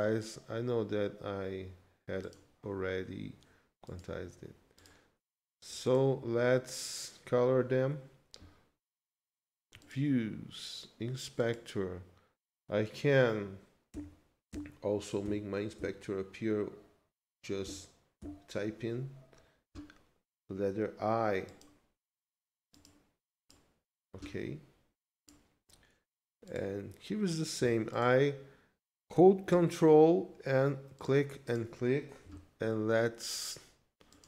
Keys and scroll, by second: 13.9 i.